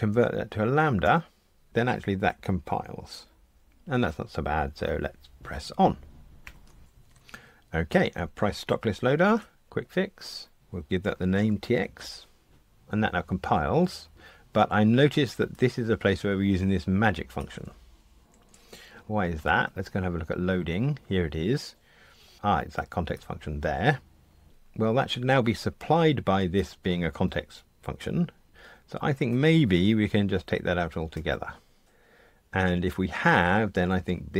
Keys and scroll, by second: 6.4 super+F9, 9.2 F1.